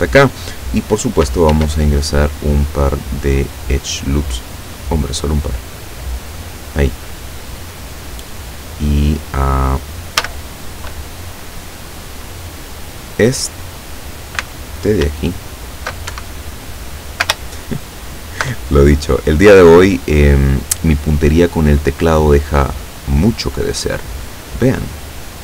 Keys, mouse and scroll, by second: 1.6 ctrl+r, 3.5-3.9 scroll up 2, 4.5 scroll down 2, 5.3 click, 10.3 a, 15.1 alt+a, 15.3 alt+right click, 16.1 alt+Escape, 17.9 alt+shift+right click, 19.6-23.2 drag, 24.5 click.